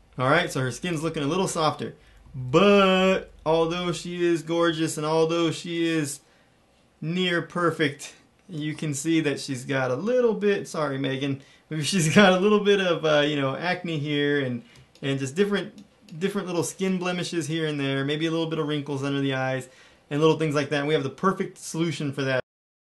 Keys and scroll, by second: 2.3 super+=, 2.7 super+=, 3.1 super+=, 4.6-7.9 typing, 14.7 space, 15.3 space.